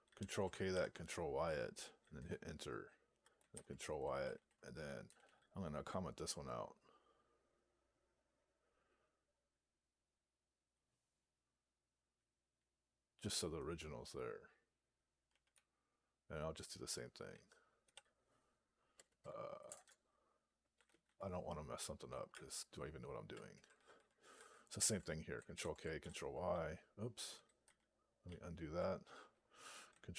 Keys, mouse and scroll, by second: 0.1 ctrl+k, 4.2 ctrl+a, 4.9 ;, 5.1 ;, 15.2 Down, 15.9 Right, 19.6-21.4 typing, 22.2 Down, 22.7 Down, 23.9 Up, 24.2 Up, 24.7 ctrl+a, 25.4 ctrl+j, 25.9 ctrl+t.